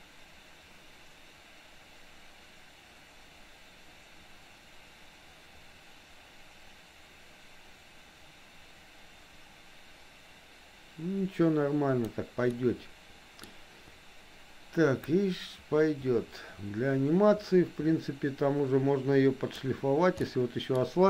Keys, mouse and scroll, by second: 12.6 middle click, 15.1-19.8 drag, 20.3 middle click.